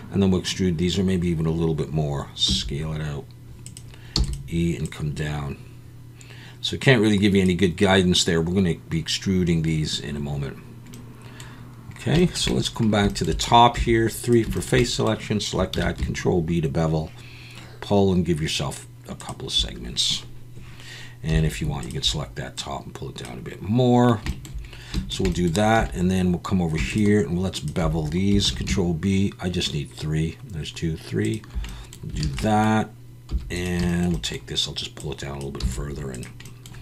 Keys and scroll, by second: 2.4 s, 4.2 e, 13.7 3, 15.7 ctrl+b, 21.3 3, 25.8 2, 28.4 ctrl+b, 32.2 alt+a, 33.3 3, 35.6 x.